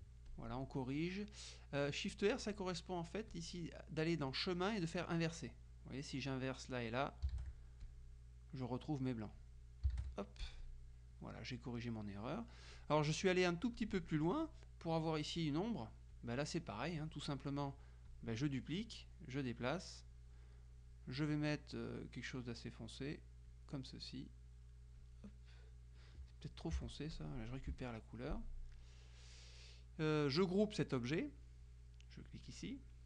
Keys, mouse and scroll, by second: 0.4 click, 2.2 click, 3.4-6.0 drag, 6.9 click, 7.5 shift+r, 7.9 shift+click, 9.5-10.5 drag, 10.5 shift+r, 10.7 shift+click, 12.3 click, 13.9-14.9 drag, 16.2 click, 18.2 click, 18.9-20.7 drag, 23.6 click, 25.1 click, 26.9 F7, 27.2 click, 27.8 F1, 28.5 click, 32.3 click.